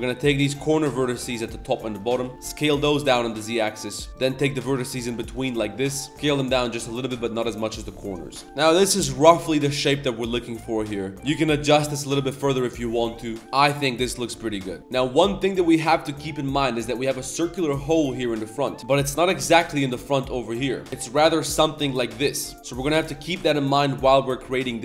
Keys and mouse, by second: 0.2 shift+click, 0.8 shift+click, 1.0 z, 1.3-1.8 shift+drag, 2.0 shift+click, 4.1 shift+click, 4.4 shift+click, 4.8 shift+click, 5.3 shift+click, 5.8 shift+click, 6.0 middle click, 6.1 z, 6.1 s, 8.1 middle click, 8.8 Tab, 8.9 middle drag, 9.3 shift+middle drag, 9.9 middle click, 10.3 middle drag, 10.8 middle click, 11.0 Tab, 11.1 g, 11.2 g, 13.4 Tab, 13.6-14.6 middle drag, 14.8 middle click, 18.3-18.8 middle drag, 18.8 Tab, 19.1 Tab, 20.8 shift+middle click, 20.9 z, 20.9 3, 21.1 middle click, 22.2 middle click, 22.7 click, 23.1 middle click, 24.5 click.